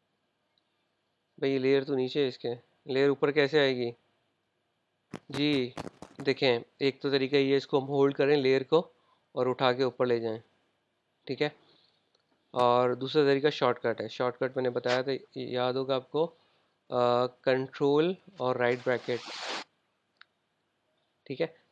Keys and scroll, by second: 5.1 super+Tab.